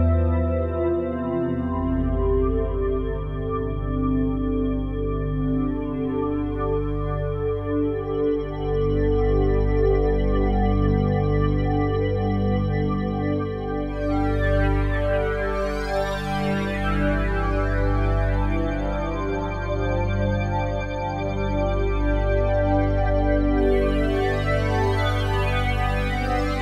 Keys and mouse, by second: 0.4-0.9 ctrl+alt+drag, 1.7-2.0 ctrl+alt+drag, 2.4 alt+click, 5.1 shift+click, 5.9 click, 6.5 click, 7.9 click, 11.0-11.9 shift+drag, 12.2 ctrl+p, 13.4 Down, 13.5 Down, 13.7 Down, 13.8 Down, 14.0 Down, 14.2 Down, 14.3 Down, 14.5 Return, 15.7 click, 16.7 r, 16.9 x, 17.1 x, 22.1 Escape, 22.8 click, 23.6 r, 23.9 x, 24.0 x.